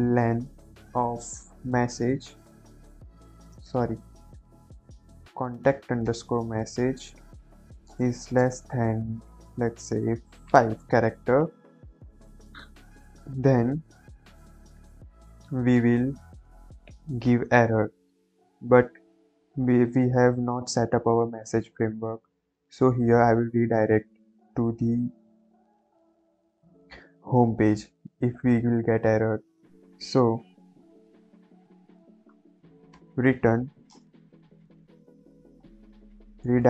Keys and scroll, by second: 0.4 Right, 1.6 m, 2.0 e, 2.3 s, 3.5-4.9 typing, 5.7 Down, 5.9 Return, 6.5 Right, 6.7 Right, 7.2 Left, 8.1 shift+,, 8.3 space, 10.4 5, 14.7 shift+;, 14.9 Return, 32.3-36.0 typing, 33.4 Return, 36.3 Return.